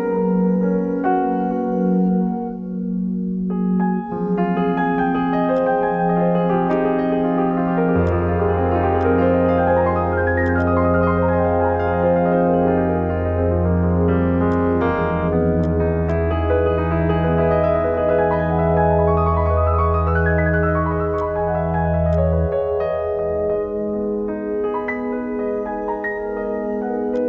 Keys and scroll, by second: 13.6-14.6 typing.